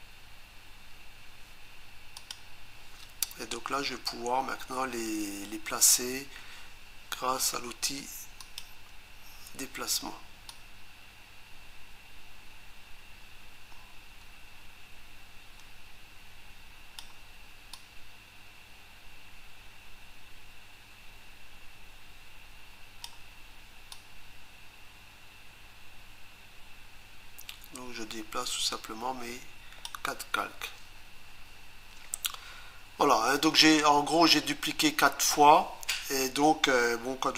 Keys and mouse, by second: 2.2 click, 8.4 click, 10.5 click, 17.8 click, 24.0 click.